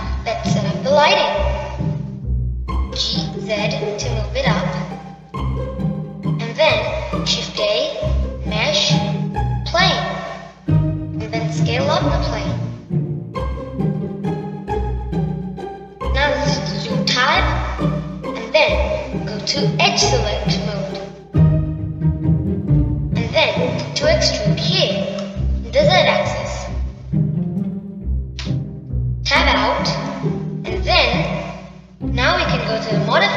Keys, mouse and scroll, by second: 0.6-3.7 middle drag, 4.8 g, 7.2-9.4 middle drag, 9.4 shift+a, 13.0 s, 15.8-16.2 middle drag, 16.2-17.3 scroll down 2, 17.3-19.0 middle drag, 19.0 b, 30.2 Tab, 30.7-33.3 middle drag.